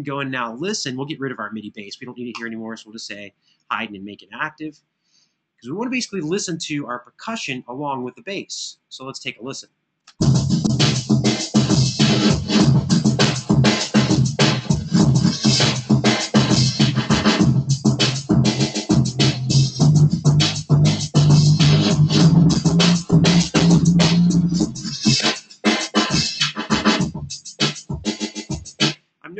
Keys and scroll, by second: 9.4 super+=, 9.8 space, 11.2 super+=, 23.6 super+z, 28.6 space.